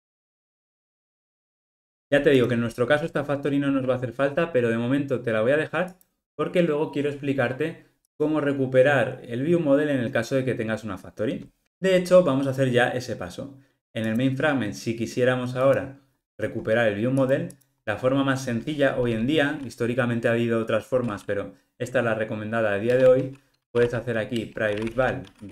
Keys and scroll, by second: 1.3 alt+super+l, 24.4 Return.